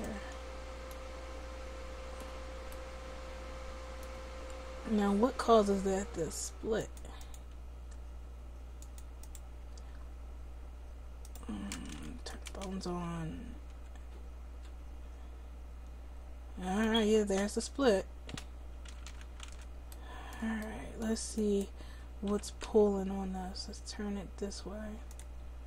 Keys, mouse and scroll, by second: 6.7-12.3 drag, 13.0 r, 18.9 a, 19.0 a, 19.4 alt+r, 22.2 r.